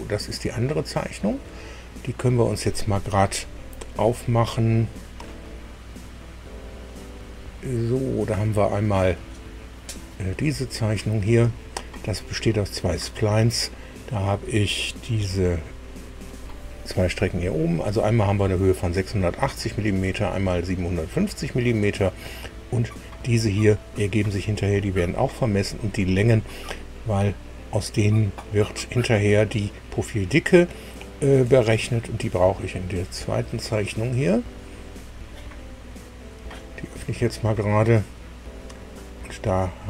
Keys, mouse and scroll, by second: 5.8-6.2 scroll up 1, 9.8 click, 12.0 scroll up 1, 13.0 scroll down 1, 32.9 click, 39.7 scroll up 1.